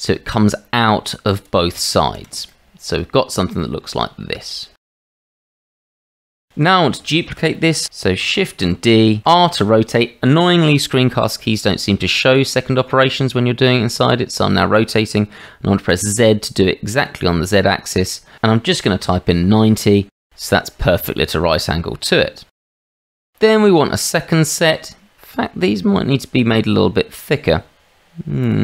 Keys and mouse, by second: 2.0 shift+z, 4.6-5.9 middle drag, 6.2 middle click, 7.1 shift+middle click, 8.6 shift+d, 21.2-22.6 middle drag, 22.9-27.5 middle drag, 28.4 click.